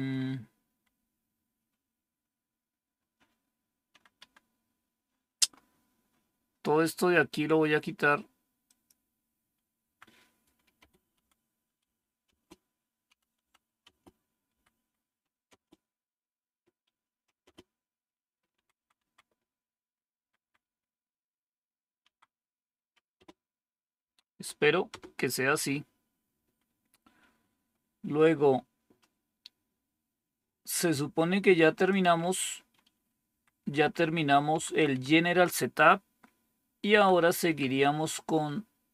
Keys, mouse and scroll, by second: 0.0 Down, 0.0 Up, 0.8 Up, 4.1 End, 4.3 Down, 9.7 Down, 10.7 space, 11.1 Down, 11.7 Up, 12.2 space, 13.0 Down, 13.3 Down, 13.7 space, 14.4 Up, 14.7 Up, 15.4 space, 17.4 space, 18.5 Down, 18.7 Down, 18.9 Down, 20.1-23.9 typing, 33.2 Up, 33.5 Up, 33.7 Up, 33.9 Up, 34.5 Down, 34.7 Down, 34.9 Down, 36.8 Down, 37.4 Down.